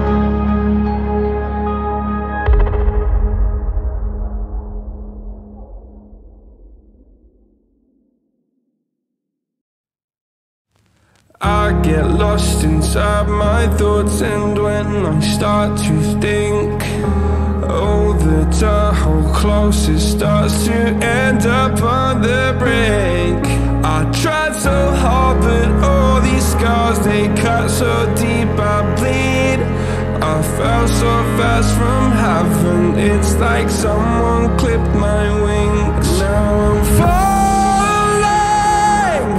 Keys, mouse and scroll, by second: 4.5-6.1 drag, 6.1-6.9 middle drag, 6.9 scroll up 2, 7.0-10.7 scroll down 7, 13.5-16.3 drag, 17.9 click, 18.2 click, 30.7 click, 32.2 s.